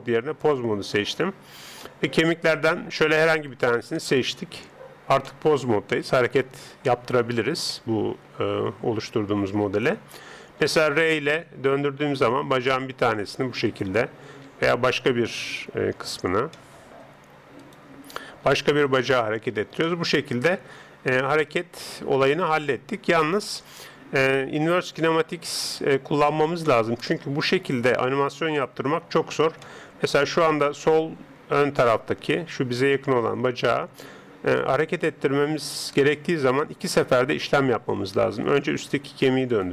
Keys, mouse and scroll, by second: 1.8-3.5 middle drag, 3.5 right click, 5.2-10.6 middle drag, 10.6 r, 13.7 right click, 14.5 r, 16.3-17.6 middle drag, 17.6 right click, 18.5 r, 19.9-21.8 middle drag, 22.8 middle click, 28.5 right click, 38.8 r.